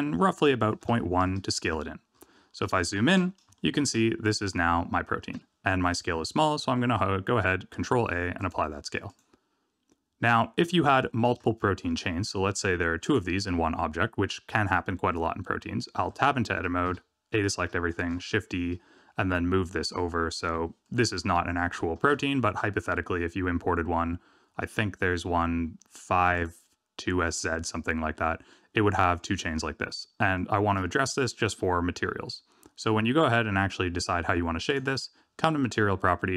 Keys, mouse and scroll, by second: 2.1-2.7 scroll up 8, 2.7 shift+middle click, 3.6 shift+middle click, 4.0-4.7 scroll up 2, 4.8 shift+middle click, 7.7 ctrl+a, 9.0 click, 10.6 middle click, 11.4 shift+middle click, 12.9 click, 16.1 Tab, 16.8 a, 19.2 shift+d, 21.9 r, 28.1 Tab, 28.4 middle click, 30.3 shift+middle click, 34.6 click.